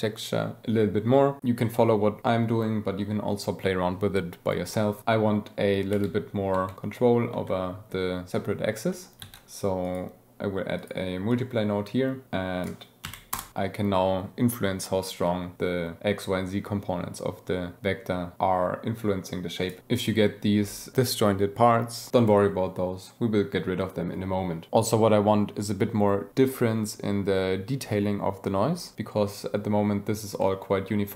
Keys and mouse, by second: 5.0 click, 5.9 g, 6.5 y, 7.3 x, 9.2 shift+d, 9.8-10.9 drag, 11.3 click, 12.2-13.4 drag, 13.5 click, 17.2-19.7 shift+drag, 19.8-20.1 drag, 30.4-31.1 drag.